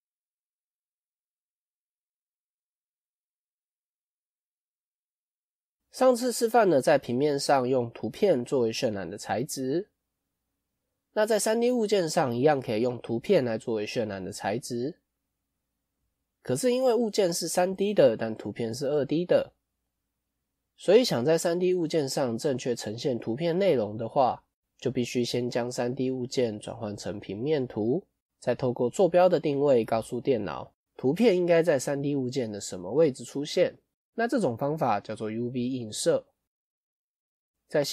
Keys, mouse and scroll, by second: 37.0 middle click.